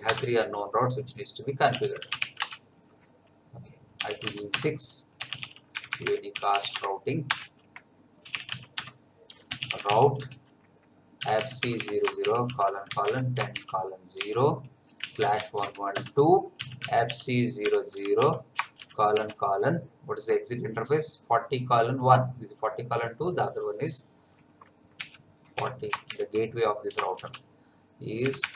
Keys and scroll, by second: 0.0 Return, 1.4-2.7 typing, 3.7-18.8 typing, 7.3 Return, 25.0 4, 25.6 0, 27.1 shift+;, 28.2 \, 28.4 BackSpace.